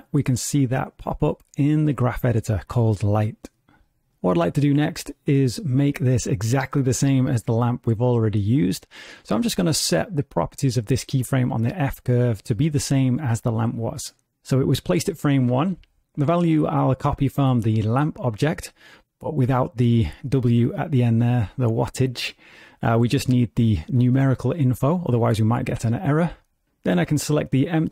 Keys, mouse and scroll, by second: 2.4 click, 4.1 click, 11.6 click, 12.3-13.5 scroll down 4, 13.5 click, 17.9 click, 18.5 click, 21.1 scroll down 2, 21.2 scroll up 1, 21.3-22.3 scroll down 1, 22.3 click.